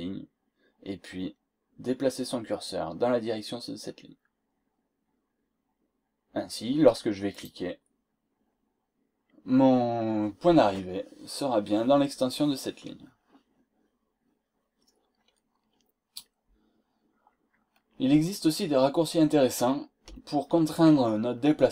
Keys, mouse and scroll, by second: 7.3 click, 15.1-15.4 scroll down 2, 15.7 scroll up 2.